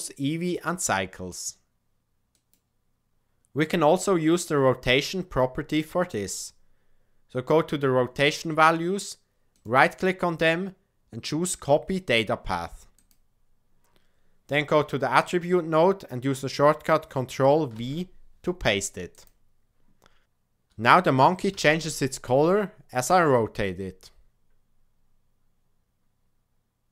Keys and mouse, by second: 4.2-6.0 middle drag, 9.6-13.2 drag, 15.1-19.2 drag, 21.5 r.